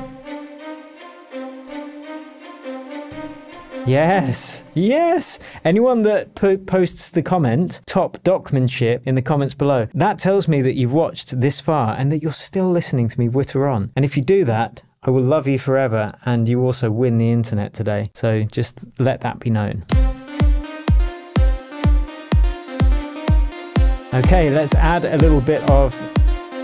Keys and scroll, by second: 3.1 shift+Tab, 4.2 space, 20.3 space.